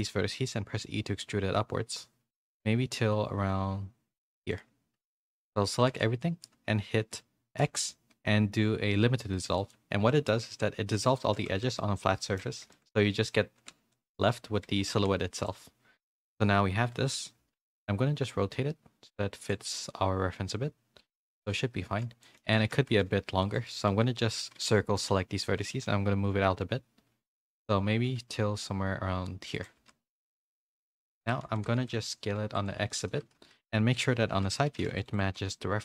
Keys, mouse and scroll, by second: 0.7 e, 4.9 Tab, 5.4 Tab, 5.9 a, 7.6 x, 10.2 middle click, 10.6 z, 11.5 ctrl+z, 11.7 middle click, 12.7 shift+middle click, 13.9 ctrl+z, 13.9 middle click, 14.7 a, 14.9 x, 16.5 KP_1, 17.0 KP_3, 17.5 z, 18.1 r, 19.7 g, 21.7 a, 22.2 shift+middle click, 22.2 a, 22.7 a, 25.6 c, 25.6 g, 29.7-31.7 typing, 30.1 Tab, 30.3 middle click, 31.0 click, 31.4 Tab, 33.3 KP_1, 33.9 z, 34.6 s, 35.2 g.